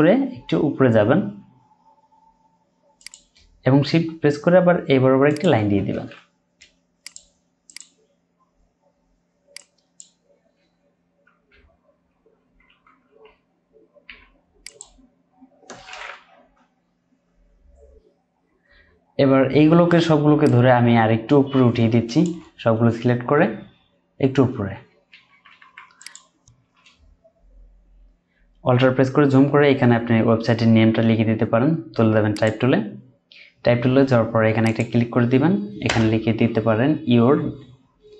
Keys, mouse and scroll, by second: 3.0 shift+click, 5.3 shift+click, 10.6 Down, 11.5 Down, 12.3 Left, 12.3 Down, 13.0 Down, 14.0 Down, 16.7-17.3 alt+scroll down 1, 17.4-17.9 scroll up 1, 22.7 Up, 24.7 Up, 25.1 Up, 26.8 Up, 26.9-28.2 scroll down 1, 28.4-29.0 alt+scroll up 1, 29.2-30.0 scroll down 1, 31.1-31.4 alt+scroll up 1, 35.8 BackSpace.